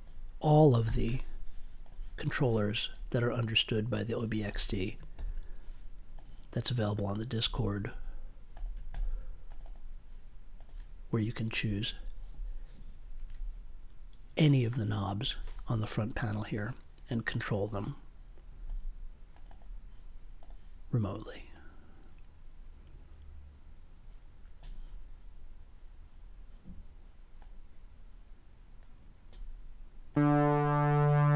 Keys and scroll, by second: 0.8 super+c, 5.1 super+v.